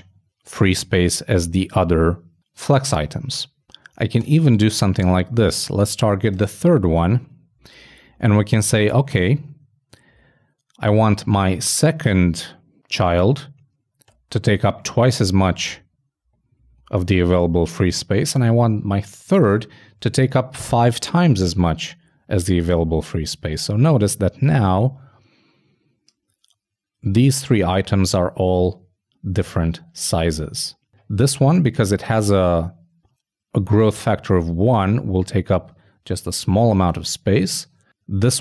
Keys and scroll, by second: 3.6 super+v, 4.2 super+BackSpace, 9.3 shift+Left, 10.0 shift+Right, 16.4 shift+Left, 16.8 shift+Right.